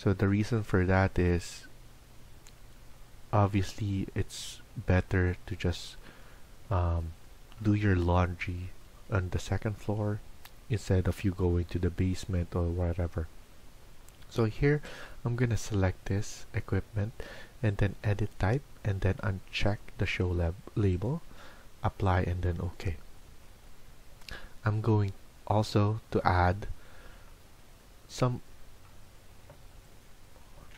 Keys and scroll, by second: 27.5 Escape, 28.9 Escape, 29.2 Escape, 30.2-30.7 typing.